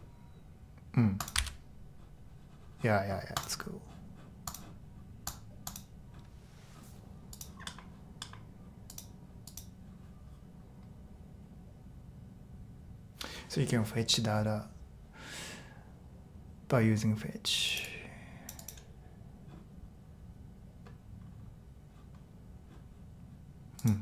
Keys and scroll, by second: 1.4 super+r.